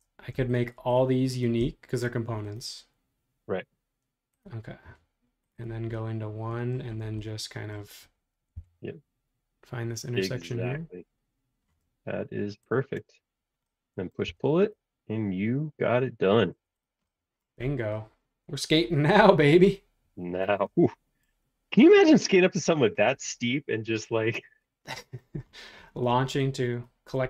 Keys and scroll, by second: 8.5 l, 12.9 space, 14.2 p, 16.3 space, 16.5 Escape, 25.9 space.